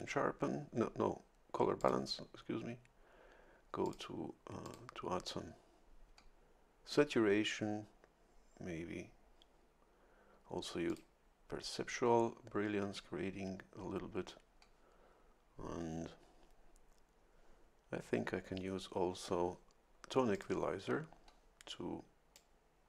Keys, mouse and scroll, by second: 1.8 click, 3.8 click, 4.6 click, 10.9 click, 20.3 click, 22.3 click.